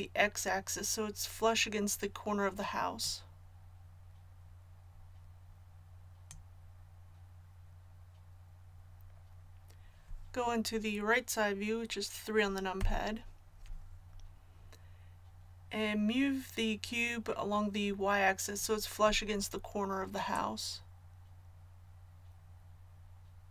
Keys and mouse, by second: 3.0-12.7 middle drag, 12.7 KP_3, 20.3-22.2 drag.